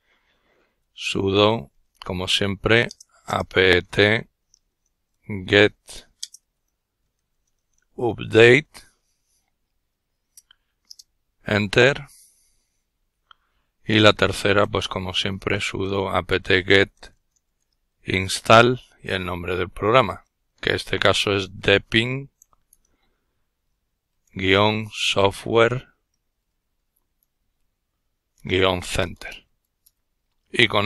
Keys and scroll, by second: 0.0-8.5 typing, 10.2 typing, 13.4-18.2 typing, 19.7-21.9 typing, 23.3-29.6 typing.